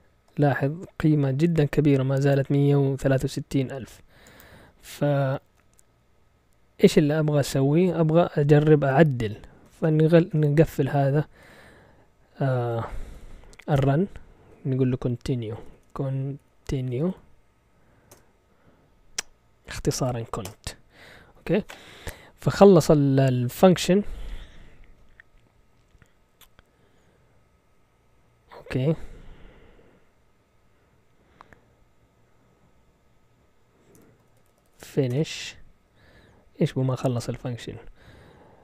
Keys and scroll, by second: 7.5 typing, 9.4-11.4 typing, 12.5-13.6 typing, 13.7 Return, 15.3-17.6 typing, 18.1 Return, 19.4-20.5 typing, 33.7-35.3 typing.